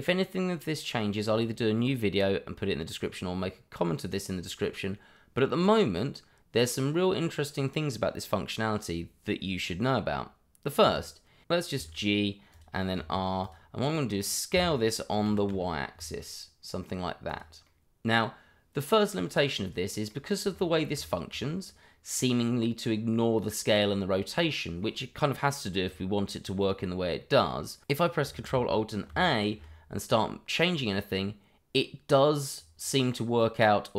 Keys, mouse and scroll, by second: 10.9 click, 11.7 g, 12.5 click, 12.9 r, 13.4 click, 13.8 middle click, 14.5 s, 15.2 y, 17.3 click, 17.6 middle click, 21.6-23.6 scroll up 1, 24.4 middle click, 27.2 middle click, 29.1 ctrl+alt+a, 30.6 click.